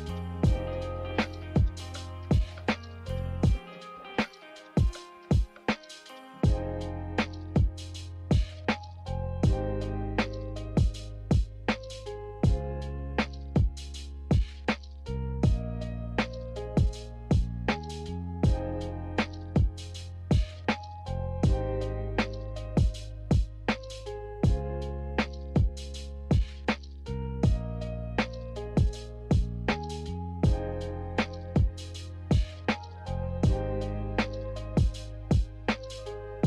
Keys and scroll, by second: 14.4 z, 18.5 a, 20.6 Delete, 23.2 g, 24.9 z, 27.0 Delete, 27.4 typing, 28.8-30.4 typing, 32.0 Delete, 32.8 a.